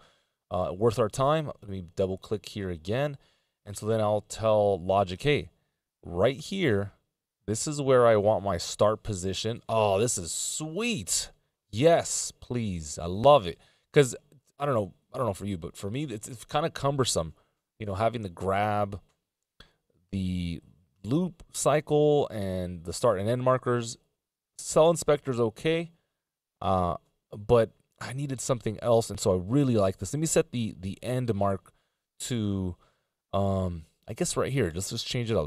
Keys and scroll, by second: 4.2 F16, 32.1 F18, 32.2 /.